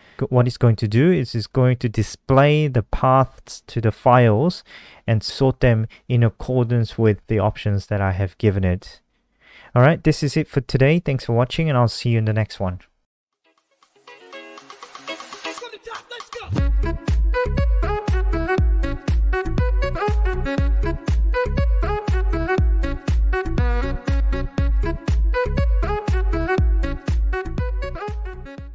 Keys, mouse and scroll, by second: 0.8 click, 2.4 F5, 3.4 click.